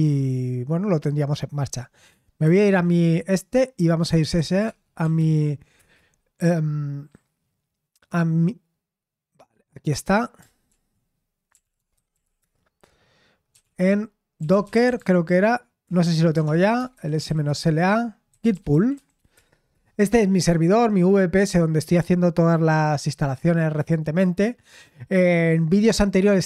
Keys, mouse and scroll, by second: 2.4 super+7, 3.7-5.6 typing, 5.7 Return, 10.6 ctrl+l, 11.2-21.0 typing, 15.8 Return.